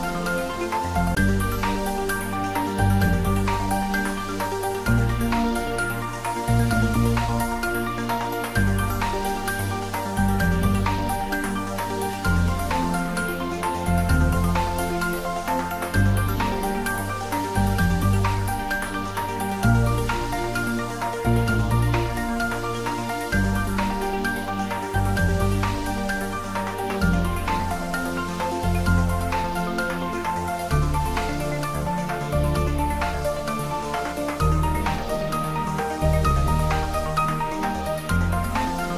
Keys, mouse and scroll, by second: 0.7-2.1 scroll up 1, 2.5 ctrl+z, 3.1 Tab, 5.2 click, 5.5 Tab, 6.3 ctrl+z, 7.2 ctrl+z, 11.7 click, 14.3 ctrl+3, 15.6 scroll up 1, 16.4 middle click, 17.3 scroll down 1, 18.8 click, 20.1 `, 20.6 3, 22.1 Tab, 22.7 scroll down 1, 23.1-24.9 middle drag, 24.9 ctrl+r, 26.9 click, 31.8 click, 32.8 3, 33.5 scroll down 1, 33.9 middle click, 34.4 scroll up 1, 35.3 ctrl+r, 36.6 click.